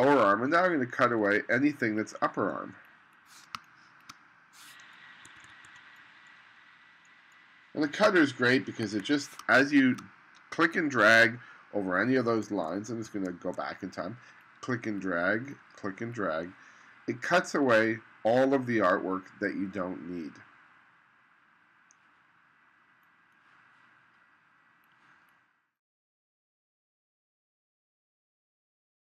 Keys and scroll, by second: 3.6 space, 5.3 2, 8.9 1, 9.5 space, 12.7 super+z.